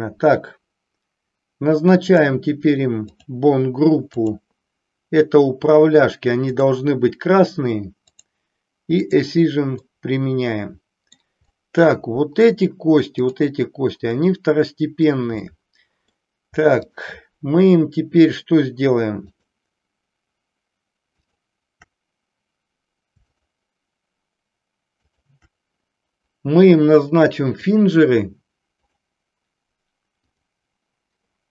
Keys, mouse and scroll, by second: 2.0 click, 3.1 click, 4.1 click, 6.5-8.4 drag, 9.7-11.1 middle drag, 11.5 middle click, 13.1-15.0 drag, 15.0 middle click, 15.5-16.3 middle drag, 16.7-18.3 shift+drag, 19.3-20.6 shift+drag, 21.1-22.6 shift+drag, 23.2-24.6 shift+drag, 25.0-26.5 shift+drag, 27.7-29.0 drag, 30.2 click.